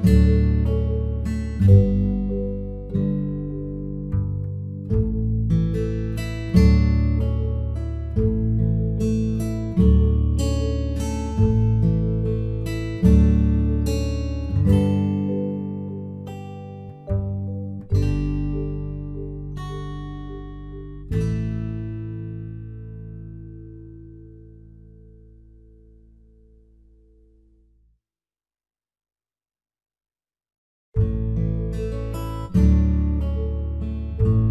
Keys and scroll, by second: 9.4 ctrl+j, 24.9 ctrl+d.